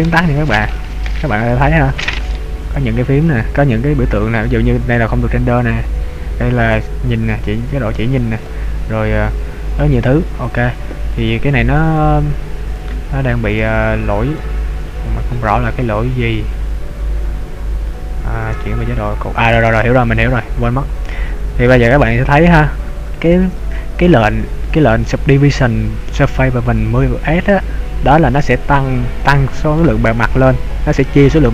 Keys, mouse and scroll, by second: 0.1 click, 0.5 click, 1.5 click, 1.9 click, 2.3 click, 2.8 click, 5.0 click, 5.8 click, 6.8 click, 7.4 click, 8.5 click, 9.9 click, 11.1-11.9 scroll up 4, 11.9-12.6 scroll down 1, 12.6 click, 14.6 ctrl+z, 18.7 Tab, 19.7-20.7 scroll down 3, 20.7-21.6 scroll up 2, 22.0 Tab, 29.9 middle click.